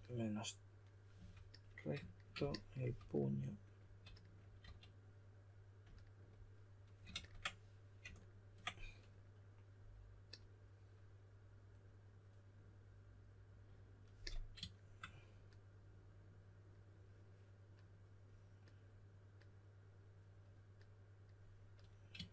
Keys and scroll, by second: 0.9-1.6 typing, 4.6 w, 7.1 super+a.